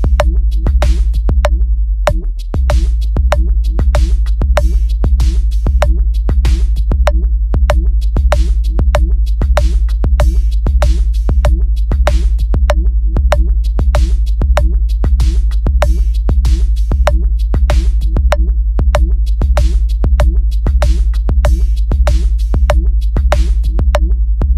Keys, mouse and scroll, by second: 0.1 click, 0.3 click, 0.5 click, 0.7 click, 1.2 click, 1.4 click, 1.6 click, 2.7 click, 3.8 click, 5.1 click, 6.6 click, 9.6 click, 11.8 click, 12.3 click, 12.9 click, 14.2 click, 14.8 click, 15.5 click, 16.0 click, 17.6 click, 18.9 click, 20.0 click, 20.7 click, 21.5 click, 22.3 click, 23.3 click, 24.3 click.